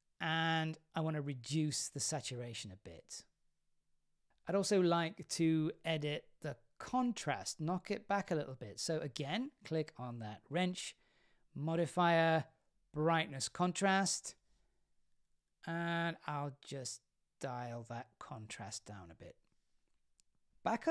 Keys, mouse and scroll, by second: 0.3-3.8 drag, 9.9-14.3 drag, 17.7-20.5 shift+drag, 20.5-20.9 scroll up 2.